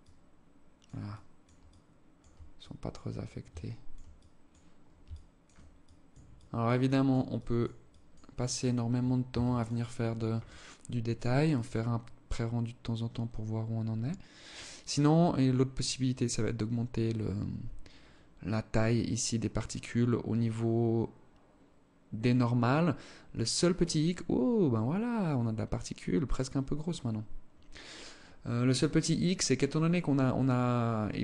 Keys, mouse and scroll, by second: 0.5 click, 1.0 alt+click, 1.9 click, 2.9 alt+click, 3.5 click, 4.5 alt+click, 5.2 click, 5.7 click, 6.3 click, 6.7 click, 7.2 click, 7.9 click, 8.7 ctrl+s.